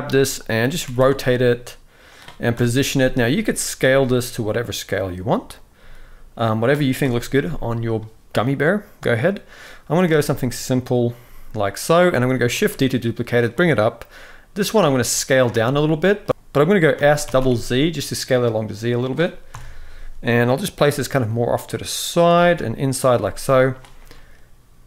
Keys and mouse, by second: 0.5 r, 2.2 KP_7, 3.0 shift+middle drag, 3.5 g, 5.5 s, 6.7 KP_1, 11.0 r, 11.0 g, 11.8 shift+middle drag, 12.3 shift+d, 14.4 s, 15.3 middle click, 16.3 s, 16.7 s, 19.2 KP_7, 20.6 g, 22.0 r, 22.8 g, 23.8-24.8 middle drag.